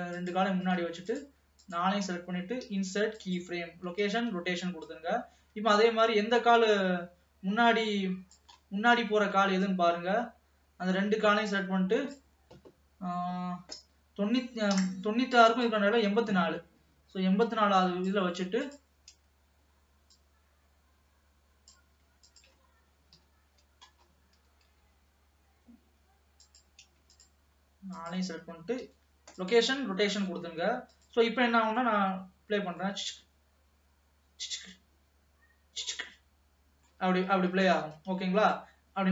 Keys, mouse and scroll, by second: 1.2 shift+click, 1.8 shift+click, 4.4 ctrl+s, 5.0-8.1 drag, 8.8 middle click, 9.3 alt+a, 9.9-12.8 drag, 15.8-19.5 drag, 20.4-22.7 drag, 23.2 KP_3, 24.0-24.4 scroll up 1, 24.4 g, 27.2 shift+click, 28.0 shift+click, 30.4 ctrl+s, 31.0 click, 31.5 scroll down 2, 31.8 middle click, 32.0 space, 33.0-37.9 middle drag, 37.9 ctrl+s, 38.3 space, 38.6-39.1 drag.